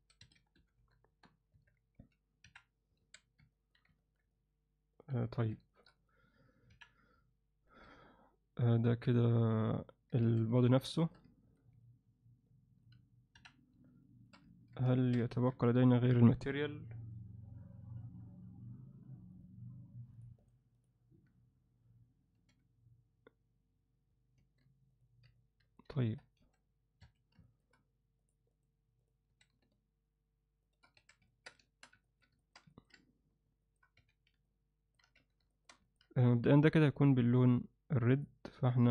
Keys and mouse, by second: 0.0 s, 1.5 Tab, 2.0 z, 2.4 KP_1, 3.0 alt+a, 3.6 ctrl+alt+middle click, 4.0 ctrl+alt+middle click, 4.3-5.0 alt+middle drag, 5.3 ctrl+middle click, 5.7 alt+shift+middle click, 6.0 click, 6.7 KP_1, 7.8 ctrl+2, 9.8 click, 10.2 alt+a, 10.6 ctrl+alt+middle click, 11.0 alt+shift+middle click, 11.3 ctrl+alt+middle click, 11.8-12.8 alt+middle drag, 13.3 KP_1, 14.1 alt+shift+middle click, 14.5 ctrl+alt+middle click, 14.9 alt+shift+middle drag, 15.3 ctrl+alt+middle click, 15.7 click, 20.1 click, 22.9 ctrl+1, 24.4 alt+a, 25.3-25.8 ctrl+alt+middle drag, 26.0 ctrl+alt+middle click, 26.4 s, 27.5 alt+shift+middle click, 28.3 click, 28.6-29.1 drag, 29.3 s, 30.9 alt+a, 31.3 ctrl+alt+middle drag, 31.7 alt+shift+middle click, 32.0 ctrl+alt+middle drag, 32.4 alt+shift+middle click, 32.7 ctrl+alt+middle click, 33.6 alt+shift+middle click, 34.0 z, 34.4 ctrl+alt+middle click, 35.1 z, 35.5 alt+shift+middle click, 35.8 ctrl+alt+middle click, 36.2 click, 38.0 click.